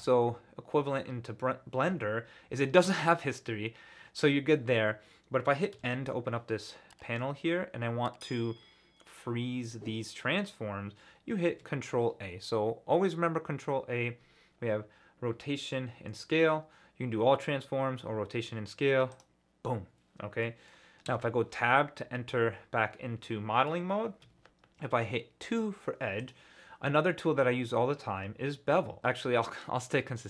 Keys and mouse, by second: 5.7 n, 11.5 ctrl+a, 20.4 middle drag, 21.1 Tab, 23.3 middle click, 24.2 2.